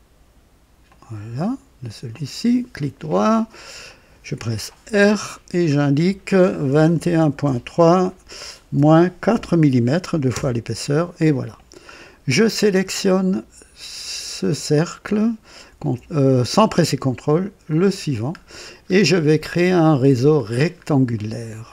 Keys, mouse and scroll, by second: 0.9 click, 2.1 click, 2.8 right click, 3.2 middle click, 3.9 click, 4.9 r, 6.7 KP_2, 6.9 KP_1, 7.4 KP_3, 8.7 KP_Subtract, 9.3 KP_4, 10.3 KP_Enter, 14.7 click, 17.7 ctrl+click, 18.4-19.2 ctrl+scroll down 3, 19.4-20.1 right drag, 20.5-20.9 scroll down 1, 21.2-21.7 right drag.